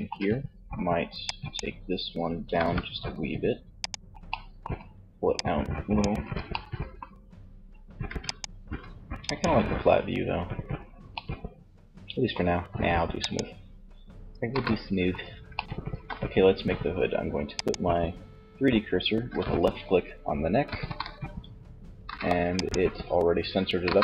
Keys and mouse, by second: 1.6 g, 3.2-5.3 middle drag, 5.3 Tab, 7.3 ctrl+s, 9.4-12.0 middle drag, 12.2-13.6 drag, 13.6 KP_1, 16.7-18.5 drag, 19.8 KP_3, 21.8 click, 22.8 KP_1.